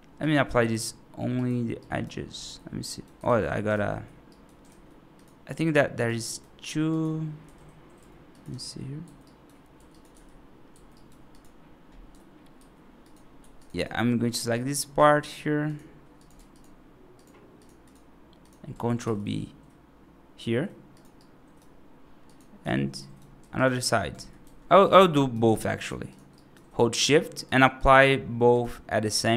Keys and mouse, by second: 0.0 click, 1.2 click, 1.7 right click, 2.3 F2, 2.7 right click, 3.1 ctrl+z, 3.6 ctrl+z, 4.1 right click, 4.5 ctrl+z, 5.9 1, 6.1 right click, 6.8 click, 7.3 g, 8.4 g, 9.1 right click, 9.6 2, 9.8 click, 10.0 g, 10.8 right click, 11.2 click, 12.0 3, 12.4 1, 12.9 click, 13.2 2, 13.4 click, 13.6 click, 14.4 right click, 16.0 click, 17.0 shift+click, 17.4 shift+click, 18.9 ctrl+b, 21.0 right click, 22.2 click, 22.9 right click, 24.0 ctrl+z, 24.3 ctrl+z, 24.7 ctrl+z, 25.0 right click, 25.7 shift+click, 26.2 right click, 27.6 shift+click, 28.9 right click.